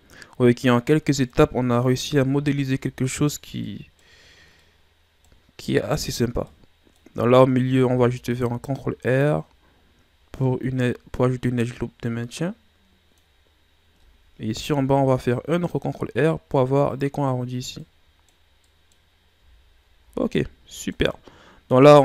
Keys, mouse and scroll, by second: 1.4-1.8 scroll up 1, 1.8 right click, 2.1 Tab, 2.6-4.0 middle drag, 4.0 scroll up 2, 4.6-7.8 middle drag, 7.8 ctrl+r, 10.3-13.4 middle drag, 14.5 ctrl+r, 17.8-19.3 middle drag, 19.3 Tab, 19.8 scroll down 4, 20.0 a, 20.3-21.2 middle drag, 21.2-22.0 scroll up 1.